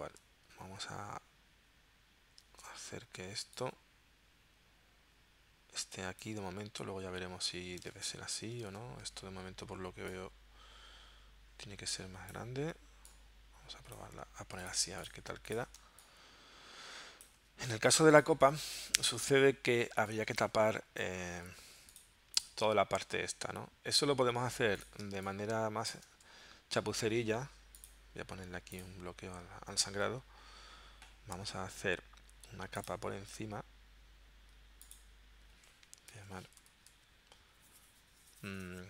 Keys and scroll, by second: 2.6 super+Tab, 8.0 super+Tab, 8.6 super+Tab, 14.8 z, 15.8 space, 20.0 space, 21.5 v, 24.4 z, 25.1 space, 26.3 v, 35.9-37.4 typing.